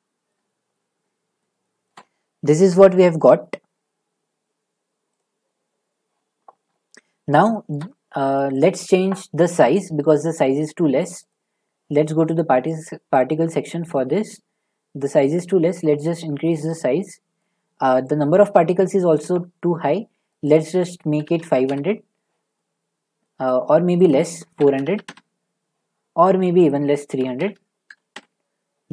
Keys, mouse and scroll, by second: 0.1 shift+scroll, 0.3 shift+middle click, 1.4 middle click, 1.9 shift+middle click, 5.2 click, 7.7 shift+middle click, 8.6 click, 11.3 click, 12.3 click, 14.2 middle click, 18.2 click, 20.3 click, 20.5 click, 21.2 typing, 21.7 Return, 23.2 middle click, 24.1 click, 24.6-24.9 typing, 25.0 Return, 26.7 click, 27.2 typing.